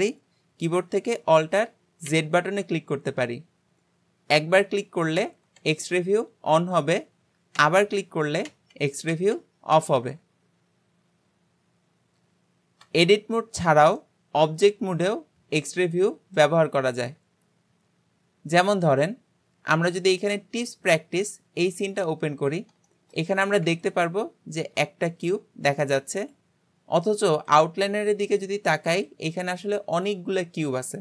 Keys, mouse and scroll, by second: 2.1 alt+z, 4.4 alt+z, 5.6 Tab, 7.6 alt+z, 8.5 alt+z, 12.9 Tab, 13.7 alt+z, 14.0-17.2 middle drag, 18.7 click, 22.9-31.0 shift+middle drag.